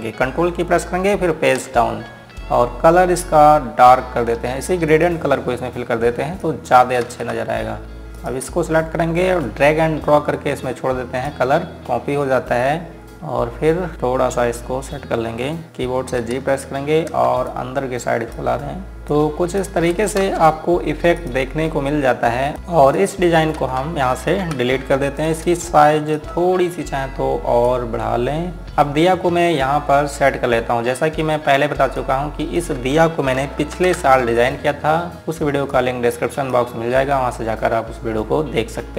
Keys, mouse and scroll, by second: 0.5 ctrl+Num_Lock, 3.0-3.9 scroll down 1, 3.9 scroll up 1, 5.6 click, 7.9 z, 8.9 click, 12.9 scroll down 1, 13.1 click, 13.9-15.6 scroll up 1, 17.0 g, 18.2 click, 19.9 shift+click, 21.0 space, 21.5 scroll down 1, 21.9 click, 22.5-22.9 scroll down 1, 22.9 click, 24.4 z, 25.2 Delete, 25.9 click, 26.6 click, 28.7 click, 29.1-29.7 scroll down 1, 29.7-31.1 scroll up 1, 31.1 scroll down 1, 32.1-32.7 scroll up 1, 32.7 click, 34.1 ctrl+g, 35.1 click, 36.5 click, 38.0-38.9 scroll up 1.